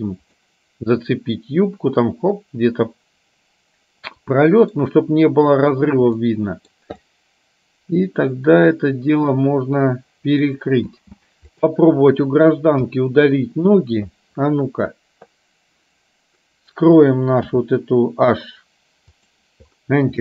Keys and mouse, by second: 0.6-5.0 middle drag, 6.4 middle click, 7.3-10.6 middle drag, 11.0 space, 13.0 KP_1, 17.5 h, 19.3 click.